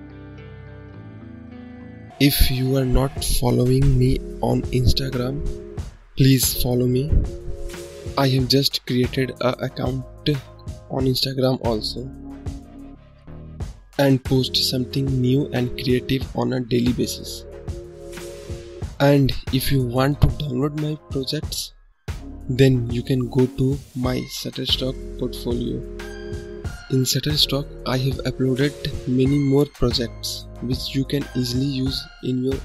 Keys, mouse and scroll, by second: 7.3 click, 8.8 ctrl+click, 15.7 click, 17.4 ctrl+click, 19.4 scroll up 2, 20.0-21.5 scroll down 2, 21.5-21.9 scroll down 1, 21.9 scroll up 3, 22.6-24.9 scroll down 1, 24.9-25.2 scroll down 2, 26.9-30.8 drag, 30.8-31.5 scroll up 4, 31.7-32.3 scroll down 4.